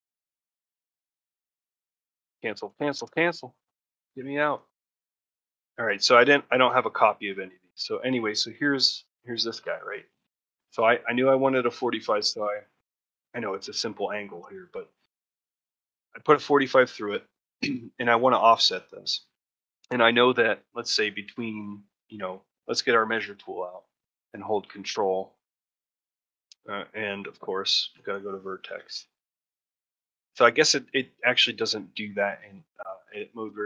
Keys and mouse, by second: 3.0 Escape, 6.2 click, 6.4 g, 7.6 click, 20.4 shift+click.